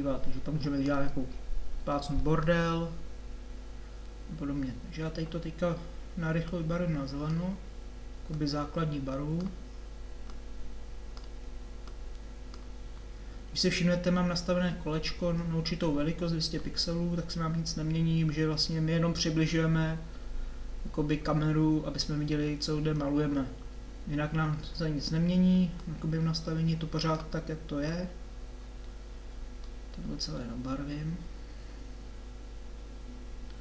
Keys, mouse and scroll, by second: 18.2-23.0 drag, 23.3-33.2 drag.